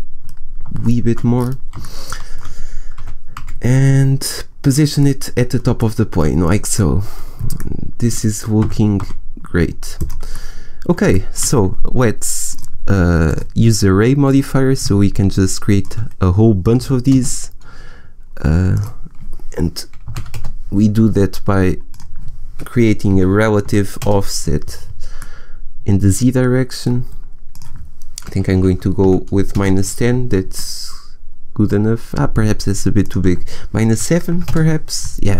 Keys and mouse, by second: 2.9 g, 4.1 click, 8.5 g, 9.9-11.3 drag, 12.4-13.5 middle drag, 15.7-17.3 middle drag, 17.5-18.6 middle drag, 24.2-27.4 middle drag, 29.1-30.5 middle drag, 32.3 middle click, 34.8 middle click.